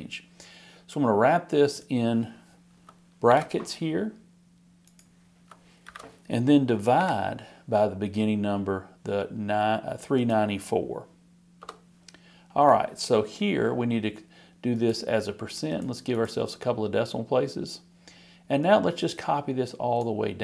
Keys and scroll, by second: 3.3 shift+9, 5.8 shift+0.